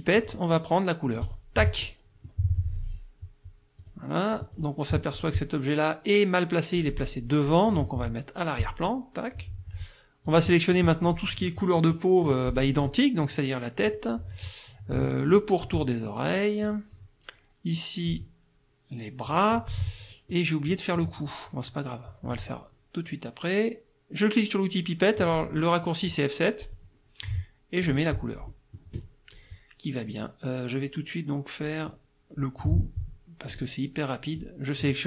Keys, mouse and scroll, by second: 0.2 click, 1.3 click, 1.8 middle click, 3.8 click, 4.6 click, 5.2 click, 8.6 click, 10.3 click, 10.8 middle click, 13.9 click, 15.3 shift+click, 16.6 shift+click, 18.1 shift+click, 19.3 shift+click, 20.3 middle click, 26.6 click, 27.8 click, 28.5 middle click, 33.5 click, 34.4 click.